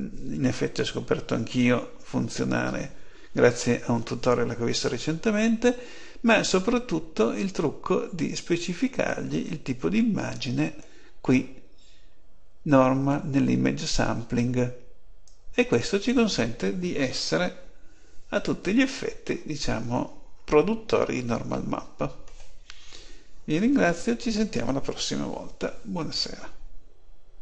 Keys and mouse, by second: 6.2-8.1 drag, 15.1-16.8 drag.